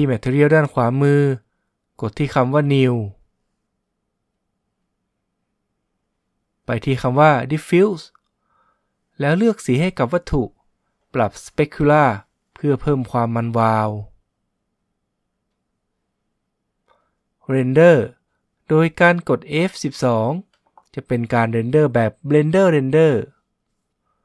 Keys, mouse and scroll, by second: 3.5-5.5 drag, 5.6-7.5 drag, 9.1-10.9 drag, 14.5-16.3 drag, 19.9 F12.